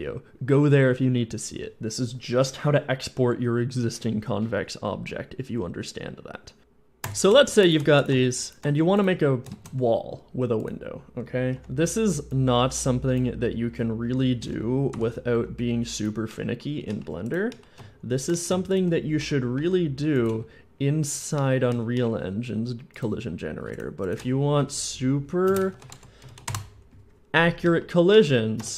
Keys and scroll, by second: 6.6 shift+End, 8.7 shift+x, 9.8 shift+a, 11.6 Tab, 14.8 ., 15.2 s, 19.4 i, 20.2 x, 20.4 x, 21.6 z, 25.3 alt+shift+space, 25.5 alt+shift+b, 25.6-26.3 typing, 26.3 Return, 26.6 Return, 28.4 Tab.